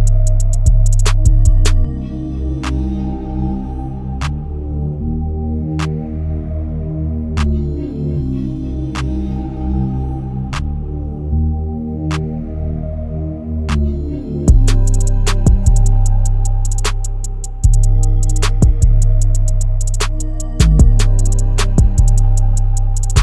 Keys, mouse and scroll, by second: 1.4-4.9 drag, 7.1-9.0 drag, 10.7-12.6 right drag, 12.7 click, 13.1-13.7 scroll down 5, 13.7-14.5 drag, 15.3 drag, 15.7 click, 17.0 click, 18.3-20.3 drag.